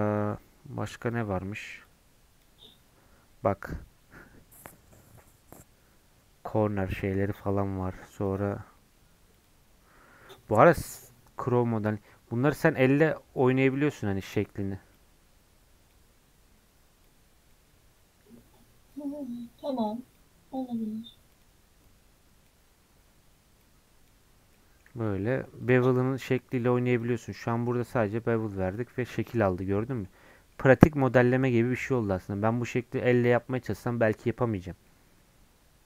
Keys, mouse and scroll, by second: 3.3 scroll down 1, 3.5-6.5 middle drag, 8.1-10.3 drag, 10.3-12.7 middle drag, 12.7-24.4 drag, 24.4 scroll down 2, 24.5 middle click, 25.1 Tab, 25.3 middle click, 25.6 click, 25.9 middle click, 26.4 click, 26.6 right click, 27.1 middle click, 28.0 scroll up 2, 28.2 Tab, 28.4-30.8 middle drag, 30.8 scroll up 2, 31.0-35.8 middle drag.